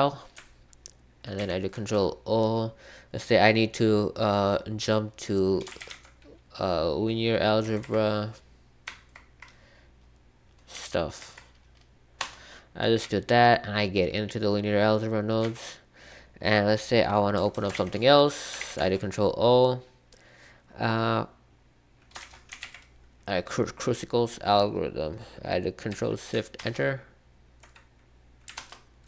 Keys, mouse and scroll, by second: 1.3 ctrl+o, 5.5-6.3 typing, 7.6 Down, 7.8 Down, 8.8 Down, 10.7 Up, 11.1 Down, 12.1 Return, 13.0-17.7 typing, 18.5 ctrl+o, 22.2-23.1 typing, 26.5 ctrl+alt+Return, 28.5 alt+Return.